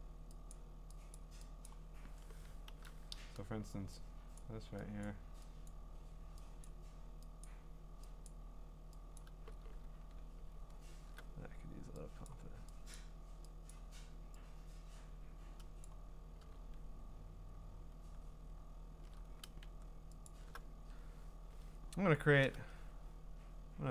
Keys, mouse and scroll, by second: 0.5 click, 1.1 click, 1.7 click, 2.7 ), 4.4 click, 5.0 click, 5.7 click, 6.7 click, 7.4 click, 8.3 click, 9.2 click, 9.7-10.8 scroll, 10.8-12.3 scroll, 12.3 click, 12.9 click, 13.7 click, 15.8 click, 16.5-18.5 ctrl+scroll, 18.5-18.9 scroll up 6, 20.3 alt+click, 22.9 scroll up 2, 23.2 scroll down 2, 23.8-23.9 scroll up 1.